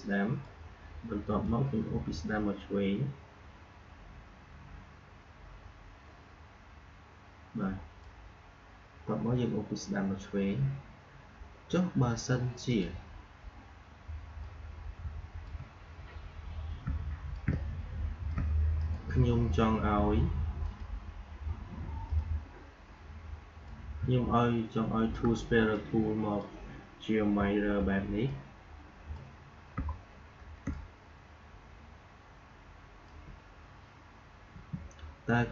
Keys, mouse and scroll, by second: 10.3-11.7 scroll down 1, 12.6-18.7 drag, 18.7 right click, 20.5-25.6 drag, 25.6-27.4 drag, 27.5 alt+scroll down 1, 28.2-29.8 drag, 29.8 alt+scroll up 1, 30.5 space, 30.7 click, 31.0 space, 34.4 Delete.